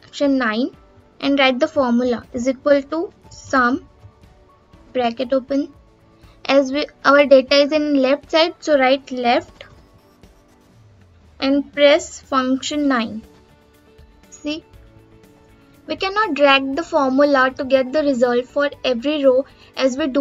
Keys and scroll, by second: 12.1 F9.